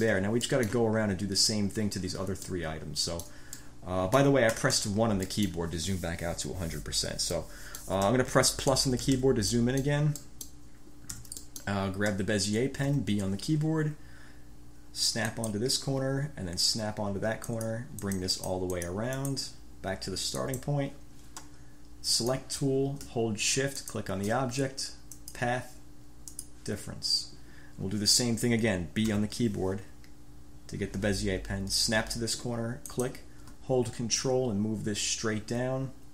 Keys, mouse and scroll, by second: 0.0 click, 0.1 scroll up 4, 0.2 drag, 0.3 1, 0.6-1.0 drag, 2.7-3.7 drag, 3.8 click, 4.7 1, 5.5-5.9 scroll up 2, 5.5 click, 7.5 click, 8.1 scroll up 1, 8.9 =, 9.7-10.2 drag, 10.4 click, 11.3 =, 11.6 click, 13.1 b, 15.5 click, 17.6 click, 20.7 click, 22.3 click, 24.0 shift+click, 25.3 click, 26.4 click, 29.2 b, 32.7 click.